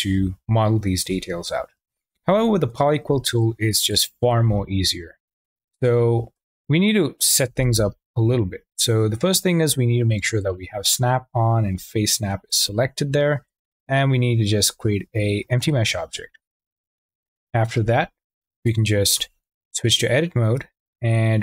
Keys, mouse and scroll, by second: 1.8 ctrl+z, 2.1 ctrl+z, 2.4 ctrl+z, 2.7 ctrl+z, 3.0 ctrl+z, 3.6 click, 4.1 Tab, 6.3 Tab, 6.5 click, 7.5 ctrl+z, 8.1 w, 10.4-11.5 drag, 11.7 Tab, 12.4 Tab, 13.7 shift+a, 19.1 Tab, 20.8 shift+a.